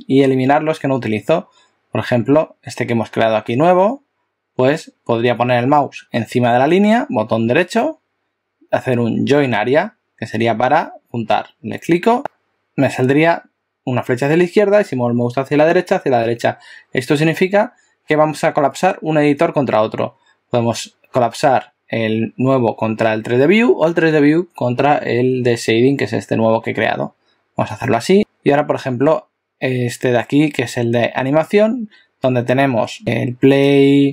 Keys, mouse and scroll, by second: 7.6 right click, 12.2 right click, 33.6 click.